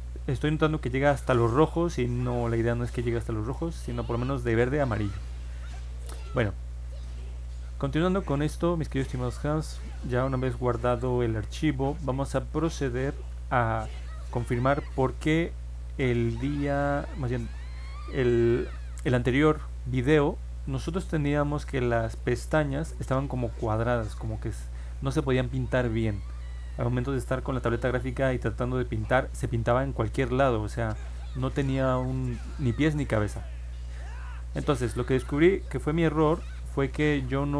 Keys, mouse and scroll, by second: 6.9 click, 9.3 click, 11.7 middle click, 11.9 scroll down 1, 12.2 scroll up 1, 13.6 click, 15.2 middle click, 15.5 middle click, 16.6 click, 20.6 click.